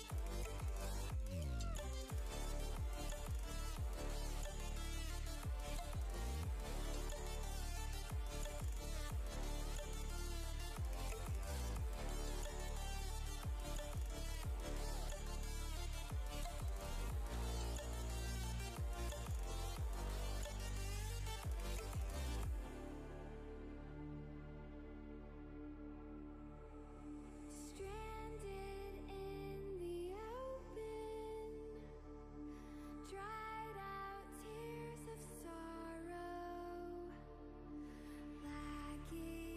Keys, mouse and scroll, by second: 1.9-8.7 drag, 8.7 right click, 12.1-22.7 drag, 22.7 ctrl+t, 23.4-29.1 drag, 29.5 click, 30.4 right click, 31.0 click, 31.2 right click, 31.9 click, 32.1 click, 34.4 click.